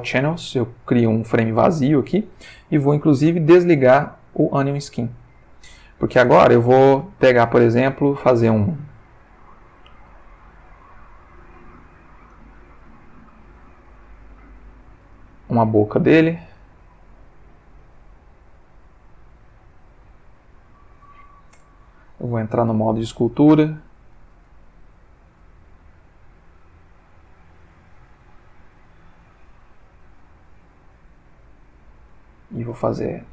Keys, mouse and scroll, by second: 3.6 click, 4.3 click, 4.7 click, 10.1 click, 12.3-18.7 drag, 19.8-21.2 drag, 21.6 Return, 22.7 ctrl+Tab, 23.7 click, 24.2 f, 24.8 click, 25.4-26.4 drag, 26.5-27.1 drag, 28.5-29.2 drag, 29.4-30.8 drag, 30.9-32.0 drag.